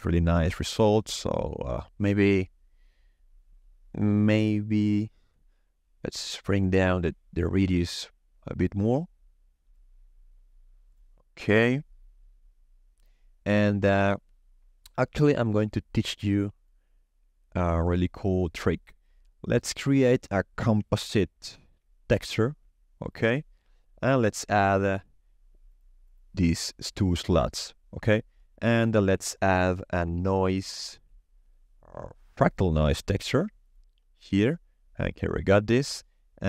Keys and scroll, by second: 19.9-21.3 typing, 22.1 Return, 29.1 shift+a, 30.2-31.4 typing.